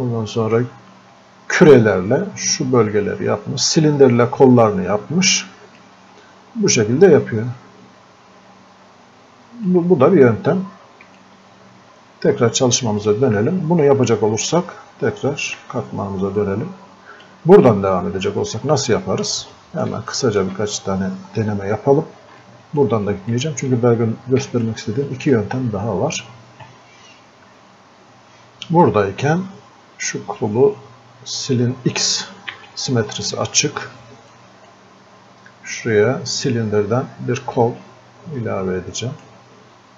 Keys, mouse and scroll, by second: 5.8 click, 6.2 scroll up 2, 6.5-6.8 scroll down 2, 7.2 scroll up 1, 7.6-8.4 scroll down 1, 8.9 scroll up 1, 9.7-13.0 drag, 15.6 f, 16.4-18.7 drag, 18.7-19.5 scroll up 2, 19.5 click, 20.7 scroll up 1, 22.4-32.5 alt+drag, 32.5 x, 33.2-39.9 drag.